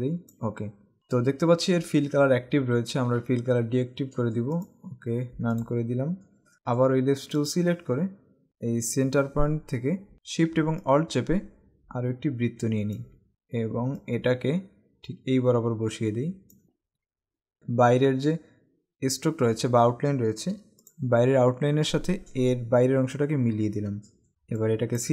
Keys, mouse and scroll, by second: 4.8 click, 7.6 click, 24.3 space, 24.6 click.